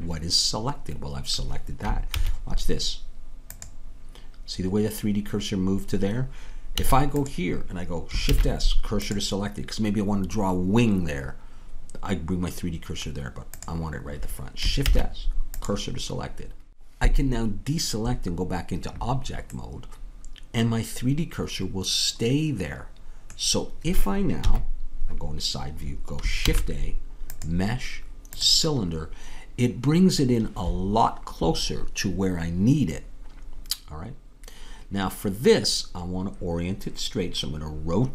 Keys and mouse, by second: 2.2 shift+s, 6.9 a, 7.2-8.3 drag, 8.3 shift+s, 14.8 shift+s, 24.5 KP_3, 26.5 shift+a.